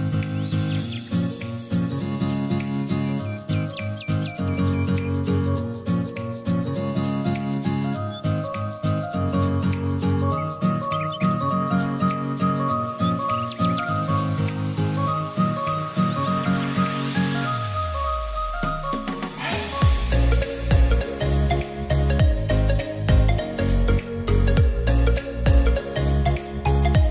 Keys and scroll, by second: 14.5 e, 16.3 r, 18.1 e, 24.6 ctrl+z.